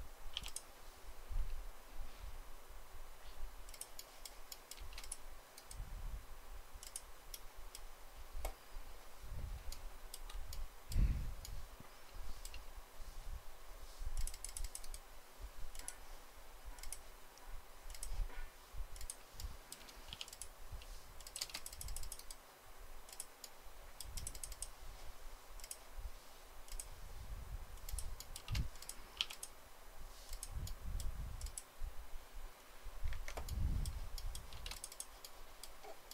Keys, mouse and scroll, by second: 0.2 p, 4.6 space, 9.6 shift+middle click, 21.2 space, 28.2 space, 29.0 p, 32.9 Escape, 34.4 space.